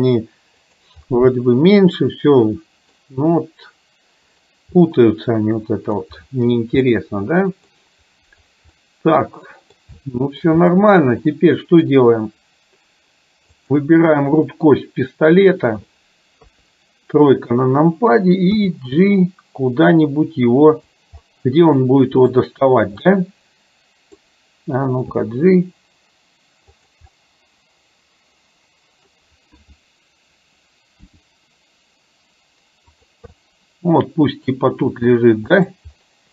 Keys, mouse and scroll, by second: 1.1-3.0 middle drag, 4.9-6.1 middle drag, 6.9 middle click, 8.9-9.9 middle drag, 10.0 shift+middle click, 10.8 middle click, 11.4 middle click, 16.5 KP_3, 18.5 g, 21.3-21.6 scroll up 1, 21.6 middle click, 22.4-22.8 scroll down 1, 23.1-24.3 middle drag, 25.3 g, 27.3-29.3 middle drag, 31.1 r, 33.4-34.5 middle drag, 34.8 r.